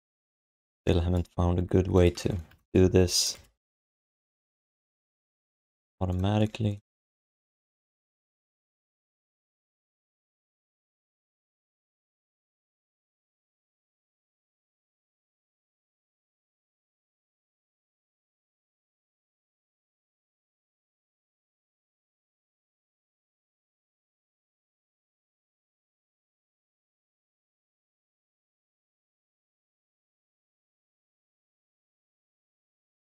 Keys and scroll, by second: 0.6 q, 2.5 BackSpace, 3.3 BackSpace, 4.3 alt+shift+d, 4.5 alt+q, 5.5 q, 11.4 alt+shift+d, 12.3 alt+q, 16.8 ctrl+h, 20.2 w, 23.5 r, 26.8 w, 32.0 4.